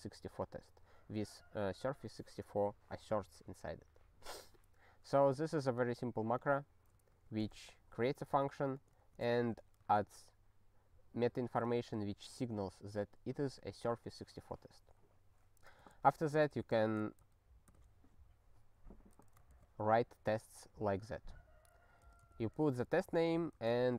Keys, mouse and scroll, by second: 6.4 click, 7.1 ctrl+n, 7.2 ctrl+a, 7.4 ctrl+space, 7.5 ctrl+e, 8.0 ctrl+g, 8.8 click, 8.9 ctrl+a, 9.4 ctrl+alt+@, 9.9 ctrl+g, 11.6 click, 19.0 ctrl+a, 19.5 ctrl+alt+@, 21.1 click, 22.0 ctrl+space, 22.3 alt+b, 22.8 ctrl+g, 23.1 ctrl+n, 23.4 ctrl+a, 23.8 ctrl+alt+@.